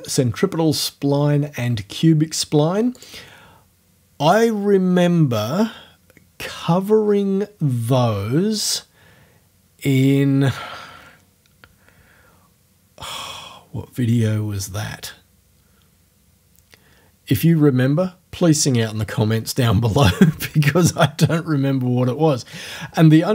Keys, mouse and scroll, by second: 3.0 click.